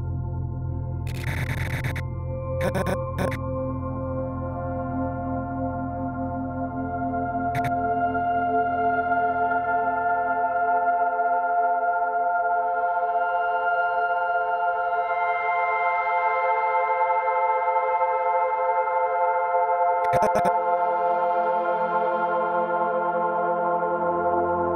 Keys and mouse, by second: 2.6 click, 3.1 click, 4.7-5.2 typing, 6.3 click, 7.5-8.3 drag, 10.6 alt+g, 12.6 alt+r, 14.2-15.5 drag, 16.8 a, 17.2 i, 17.8 click, 18.8-22.3 drag, 20.9 typing, 24.4 alt+shift+drag.